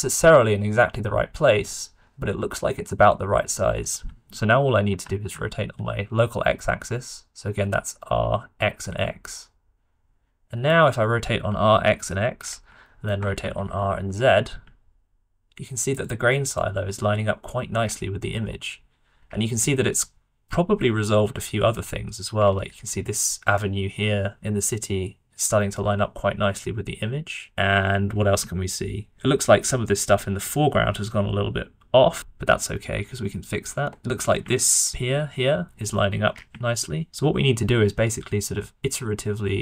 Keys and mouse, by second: 4.8 r, 13.0 shift+click, 13.2 r, 17.8 middle click, 24.3-27.4 drag, 27.4 shift+middle click, 28.1 middle click, 28.5 shift+middle click, 29.6-32.6 middle drag, 34.0-37.1 middle drag.